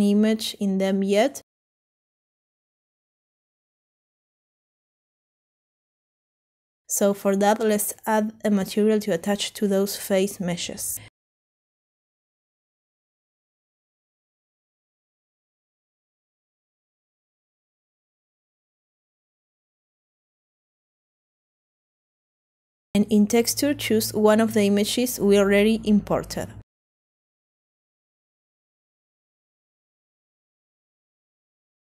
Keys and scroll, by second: 0.0-1.3 typing, 16.1-17.9 typing.